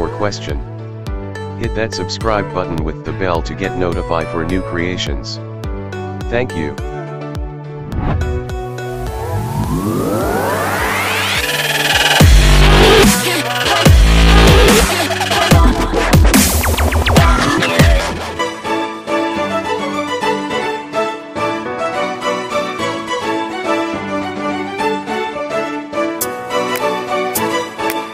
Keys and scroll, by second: 0.8 Escape.